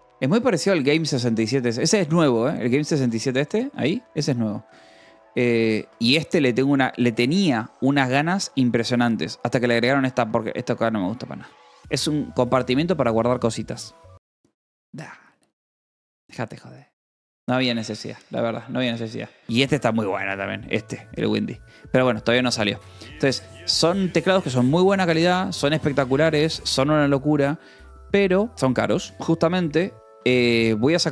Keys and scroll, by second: 0.1 k, 13.7 Delete, 19.4 Delete, 29.1 Delete, 29.7-31.1 typing.